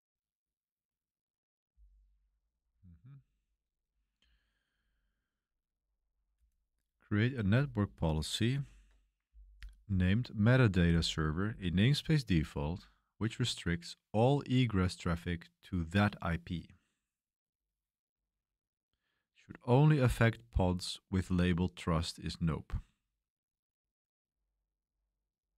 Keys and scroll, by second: 8.5 ctrl+l.